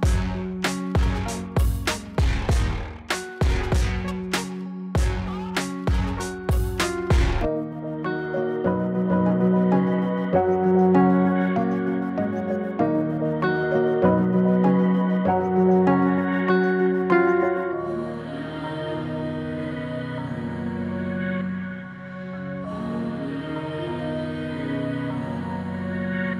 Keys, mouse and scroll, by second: 1.1-1.7 drag, 6.4 click, 11.4 scroll down 1, 13.6 click, 15.2 Return, 17.1-19.9 scroll up 2, 20.6-23.1 drag, 25.0-26.3 drag.